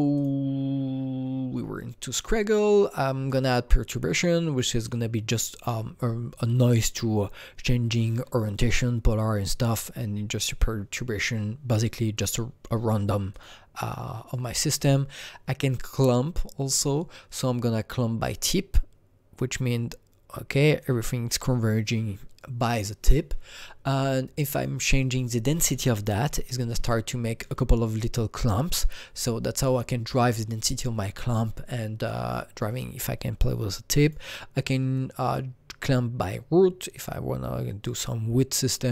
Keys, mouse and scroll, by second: 0.1 click, 2.1 click, 3.6-7.2 drag, 12.1-13.3 drag, 13.3-14.7 drag, 14.7 click, 17.9-23.4 drag, 24.3 click, 25.1-26.2 drag, 26.2 KP_1, 26.4 KP_0, 26.7 KP_Enter, 34.0 KP_Enter, 34.0 click, 34.0 KP_0, 34.9-37.8 drag.